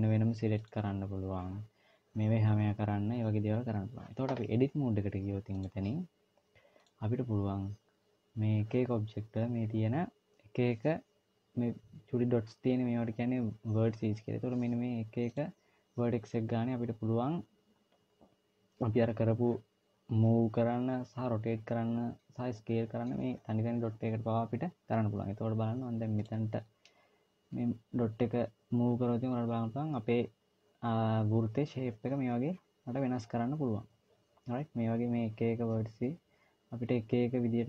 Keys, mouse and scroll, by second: 0.4 click, 5.3 click, 8.9-10.6 scroll up 2, 15.0 click, 26.0 click, 27.3 g.